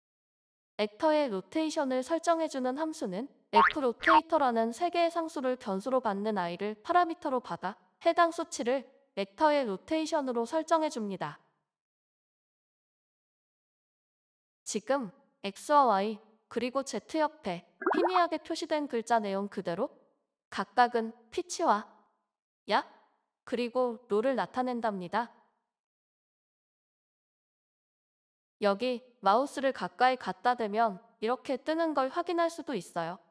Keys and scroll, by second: 0.1 b, 1.9-4.0 typing, 5.3-6.1 typing, 7.9-9.7 typing, 9.8 ctrl+z, 10.0 ctrl+z, 10.1 ctrl+z, 10.3 ctrl+z, 10.6 ctrl+z, 11.6-14.0 typing, 15.1 Right, 16.2 Left, 16.7 BackSpace, 17.1 ,, 17.4 space, 18.0 z.